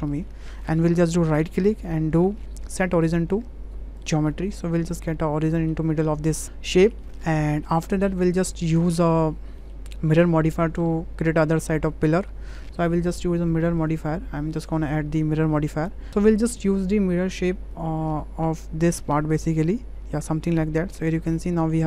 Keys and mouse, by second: 0.1 click, 0.3 Tab, 1.4-4.1 drag, 4.5-4.8 middle drag, 5.6 middle click, 7.0 shift+click, 7.5 shift+click, 8.3 click, 8.8 click, 9.6 shift+click, 13.4 click, 13.8-15.4 drag, 20.3-21.3 middle drag, 21.6 shift+middle drag.